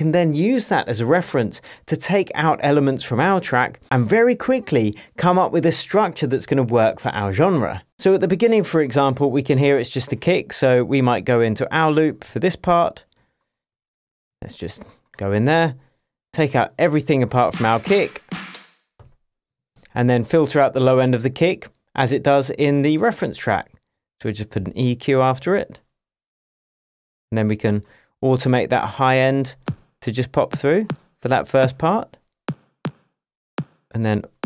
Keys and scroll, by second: 14.3 shift+super+j, 14.8 super+j, 19.0 BackSpace, 19.5 shift+BackSpace, 19.6 shift+Tab, 29.6 space.